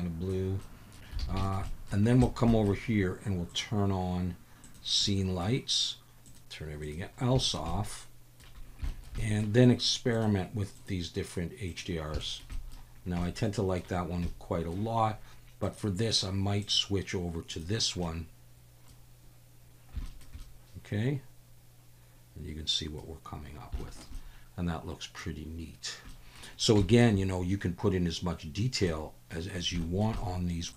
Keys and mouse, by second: 0.6-0.9 middle drag, 1.4 alt+shift+a, 1.4 shift+drag, 1.6 drag, 2.2 shift+click, 2.5 click, 3.5-4.9 drag, 5.0 middle click, 6.2 click, 6.8 click, 7.5 shift+drag, 7.7-8.4 middle drag, 8.9 shift+middle drag, 9.2 middle click, 10.1-12.0 drag, 12.2 shift+middle drag, 12.5 middle drag, 13.3 middle drag, 13.5-13.8 drag, 14.3-14.7 middle drag, 15.6-18.0 drag, 18.0-18.9 middle drag, 20.0 shift+middle drag, 20.4-23.0 middle drag, 23.8 shift+middle click, 24.2-25.2 middle drag, 26.1 middle drag, 26.9 shift+middle click, 28.9-29.3 drag, 29.8 shift+click, 30.2 click.